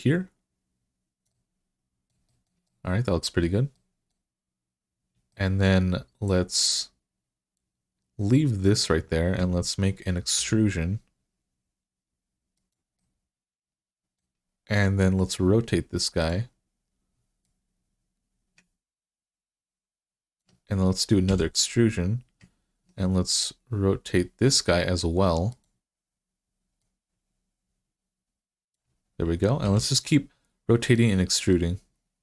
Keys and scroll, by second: 10.2 e, 21.1 e, 29.5 e.